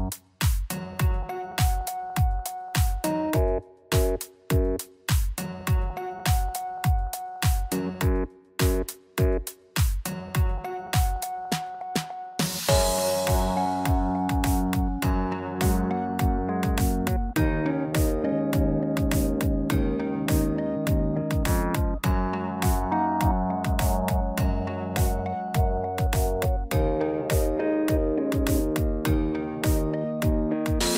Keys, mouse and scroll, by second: 2.9 ctrl+b, 10.0 middle click, 10.9-11.6 scroll up 2, 11.4 middle click, 12.7 click, 14.4 shift+middle click, 14.9 middle click, 15.4 Tab, 15.6 scroll down 3, 16.7 click, 26.6 middle click, 27.3 scroll up 1, 28.2 shift+middle click, 28.2-28.6 scroll up 4, 29.1 click, 29.7-30.6 scroll down 5, 30.0 middle click, 30.7 shift+middle click.